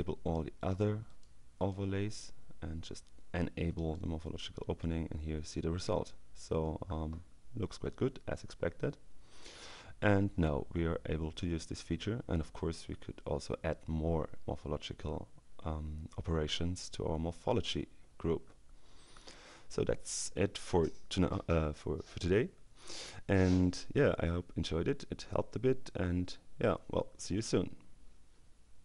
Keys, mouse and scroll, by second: 0.7 click, 1.6 click, 3.8 click.